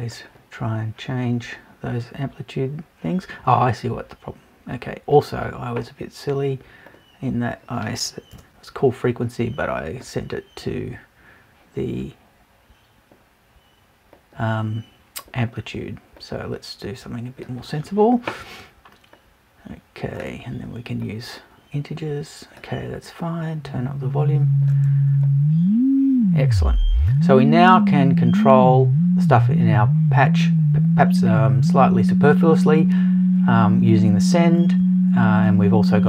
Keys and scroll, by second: 8.3 BackSpace.